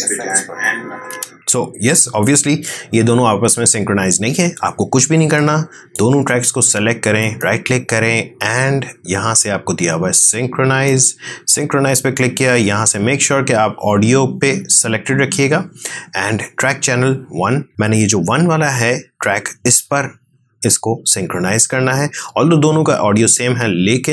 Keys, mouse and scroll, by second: 1.0 space, 5.3-7.1 drag, 7.1 right click, 10.8 click.